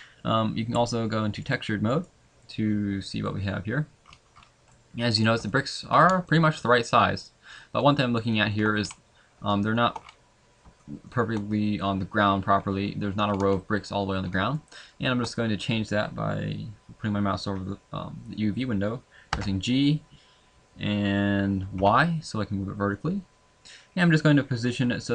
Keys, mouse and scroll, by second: 4.1 scroll up 1, 4.7 middle click, 4.8 scroll up 3, 5.5 shift+middle click, 5.9 scroll up 2, 6.2 middle click, 7.4 shift+middle click, 7.8 shift+middle click, 8.3 shift+middle click, 8.7 scroll up 1.